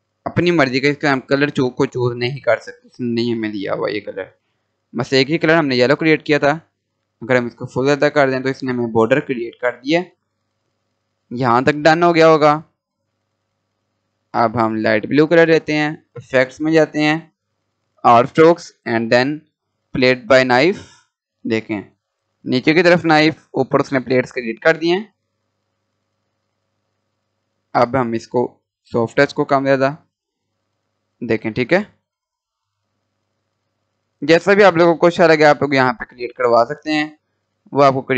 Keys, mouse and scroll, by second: 9.1-9.7 scroll up 1, 9.7 scroll down 1, 10.7 Delete, 11.8-14.6 drag, 19.8 click, 22.6-23.0 scroll up 1, 23.6-24.3 scroll down 1, 24.5 click, 25.3-25.9 scroll up 1, 26.6-28.0 drag.